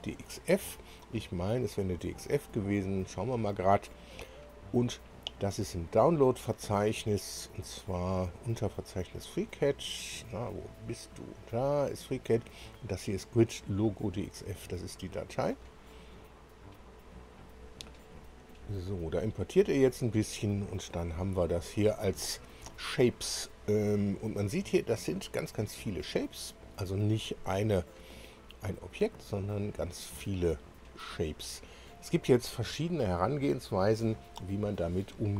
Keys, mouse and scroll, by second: 0.0 click, 5.6 click, 6.9-7.3 scroll down 1, 7.5-7.9 scroll down 1, 8.4 scroll down 1, 9.1 scroll down 1, 10.0 scroll down 1, 11.3 click, 15.5 click, 24.3 click, 25.0 click, 25.5-27.8 scroll down 11, 28.1 scroll down 2, 28.6 click, 29.0 click, 29.5-31.0 scroll up 7, 31.8-32.1 scroll up 2.